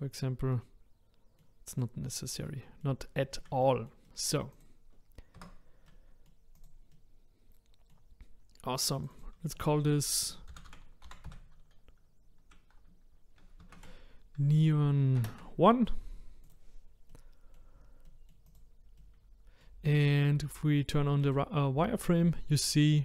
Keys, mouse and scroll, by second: 0.2-0.5 scroll down 1, 0.5-4.5 middle drag, 4.5 click, 5.3 Tab, 5.8-6.7 middle drag, 6.7 click, 6.9-9.0 middle drag, 9.1-16.5 drag, 17.1-18.5 middle drag, 18.5 click, 19.0-21.3 middle drag, 21.3 click, 22.4-23.0 middle drag.